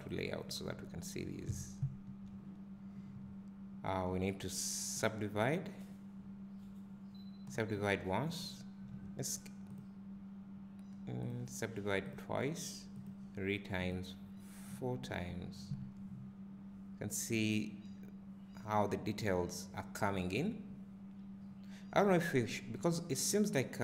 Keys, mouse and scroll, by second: 0.0 click, 0.8 `, 1.5-1.9 scroll up 1, 1.9 `, 4.9 click, 7.6 click, 8.3 `, 10.1 click, 12.2 click, 15.7 `.